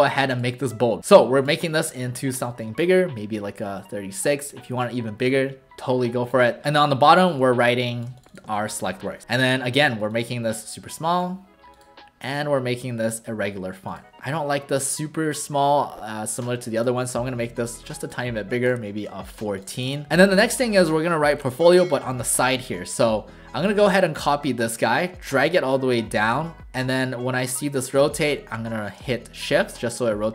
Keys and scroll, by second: 8.5 ctrl+alt+shift+a, 9.3 typing, 19.8 w.